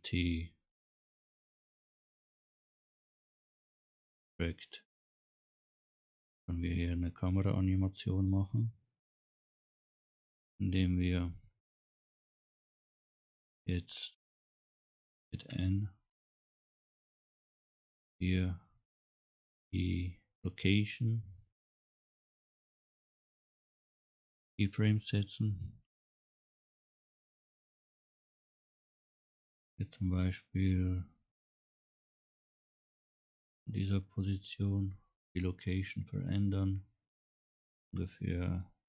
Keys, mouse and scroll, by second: 0.1 click, 2.9 scroll down 1, 3.6 scroll up 1, 9.4 click, 10.7 scroll down 1, 11.1 scroll up 1, 15.5 n, 17.3 click, 22.3 right click, 28.6 click, 33.8 click, 36.5-37.9 drag, 37.9 middle click.